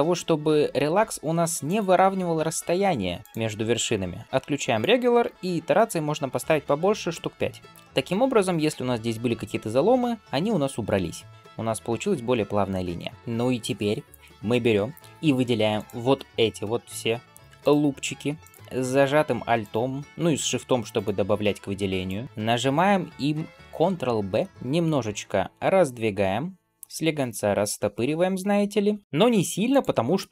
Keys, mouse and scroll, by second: 13.1 2, 15.6 alt+click, 17.0 alt+shift+click, 17.4 alt+shift+click, 18.2 alt+shift+click, 19.4 alt+shift+click, 20.8 alt+shift+click, 21.9 alt+shift+click, 22.5 scroll up 1, 23.9 ctrl+b.